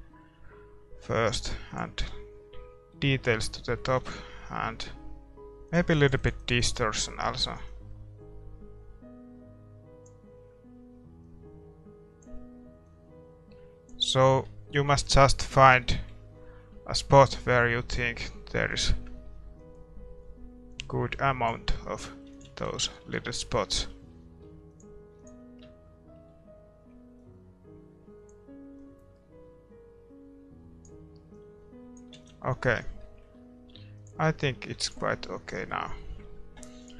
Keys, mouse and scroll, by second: 2.9-5.7 middle drag, 4.0 ctrl+s, 5.7-9.4 drag, 11.3-14.6 drag, 14.2-17.8 middle drag, 15.0 ctrl+s, 17.4-19.2 drag, 19.6-21.4 drag, 21.8-25.5 middle drag, 22.3 ctrl+s, 24.8-30.5 drag, 26.1-27.9 middle drag, 31.3-35.9 drag, 32.1 ctrl+s, 32.6-34.0 scroll down 1, 34.0-35.1 middle drag, 34.8 ctrl+s, 35.5-36.9 middle drag, 36.8-36.9 drag.